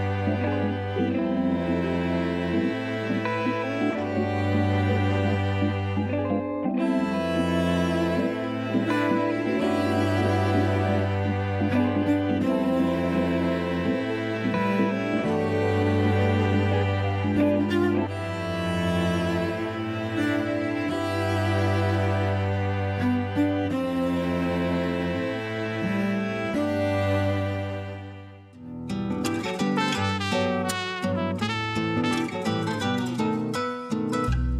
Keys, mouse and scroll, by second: 11.5 click, 12.9-14.0 drag, 26.9-27.5 shift+middle drag, 27.5-28.0 scroll up 9, 27.9 middle click, 28.5 Tab, 29.5 3, 29.7 click, 30.8 ctrl+KP_Add, 31.3 ctrl+KP_Add, 34.3 scroll down 2.